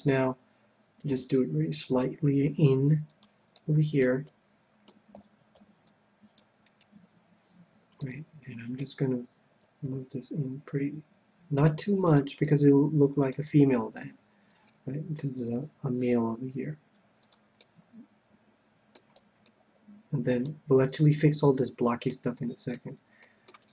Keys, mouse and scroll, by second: 1.1 g, 3.2-4.9 drag, 3.7-6.0 middle drag, 5.1 a, 5.7 c, 6.7-8.6 right drag, 8.0-9.7 middle drag, 9.8 g, 12.2-13.8 drag, 12.5-16.5 middle drag, 13.5 KP_1, 15.4 g, 17.3-18.9 drag, 17.6-23.7 middle drag, 19.2 a.